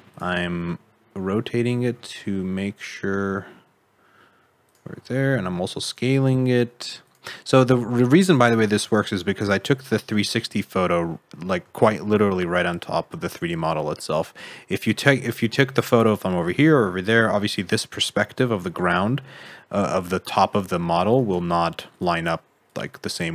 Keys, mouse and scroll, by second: 1.3-1.9 scroll up 2, 1.9 g, 4.9 s, 6.0 g, 7.3 middle click, 8.0 alt+z, 8.3 middle click, 9.3 middle click, 11.0 middle click, 11.7 shift+middle click, 13.5 middle click, 14.9 middle click, 17.0 middle click, 20.2 click, 21.1 alt+z, 21.8 click, 22.6 click, 23.1 g.